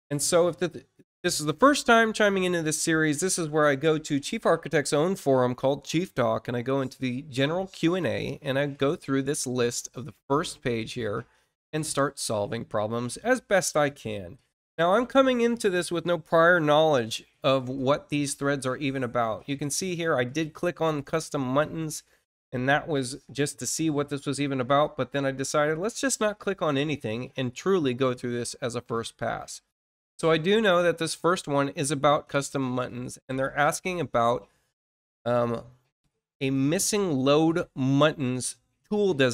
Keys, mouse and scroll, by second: 3.4-3.8 scroll down 1, 6.6 scroll down 2, 8.9-9.2 scroll down 1, 9.5-10.2 scroll down 2, 10.5-10.9 scroll up 1, 11.4-11.8 scroll down 2, 25.5-25.8 scroll down 2, 29.1 click, 35.8 scroll down 2.